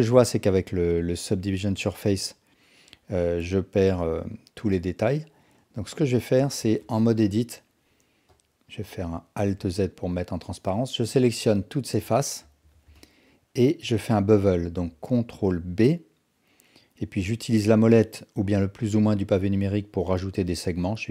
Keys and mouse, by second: 2.0 click, 5.8 Tab, 6.4 Tab, 7.2 KP_1, 8.3 click, 9.4 alt+z, 10.4 click, 10.6-11.7 drag, 12.7 alt+z, 13.0 alt+click, 15.3 ctrl+b.